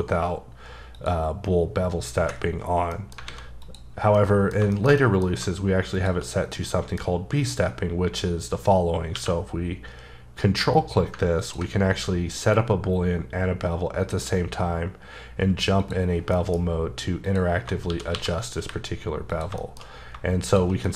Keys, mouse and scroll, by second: 0.9 click, 2.7 scroll down 1, 2.9 middle click, 3.3 alt+a, 3.6 click, 4.1 middle click, 5.9 shift+click, 6.5 middle click, 9.1 q, 11.4 ctrl+click, 15.8 click, 16.1 scroll down 2, 16.3 middle click, 17.2 click, 17.8 shift+d, 18.2 x, 18.6 y, 19.3 click, 19.6 shift+middle click, 19.8 scroll up 2, 20.4 shift+click, 20.8 middle click.